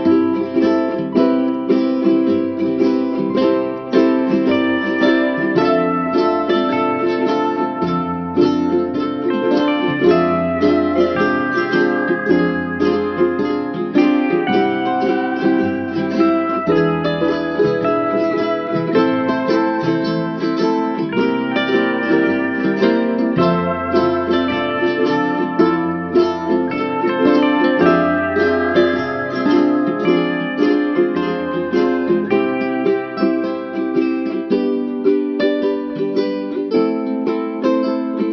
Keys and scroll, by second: 28.7 ctrl+-, 30.2 ctrl+=, 32.6 ctrl+alt+shift+n.